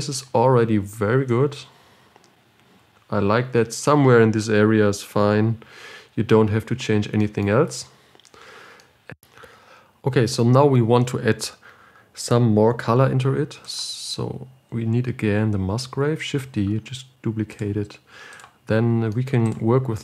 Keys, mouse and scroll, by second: 1.8-8.2 drag, 8.2-8.7 scroll down 4, 9.2 middle click, 9.5 ctrl+shift+click, 14.3-16.9 drag, 16.9 shift+d.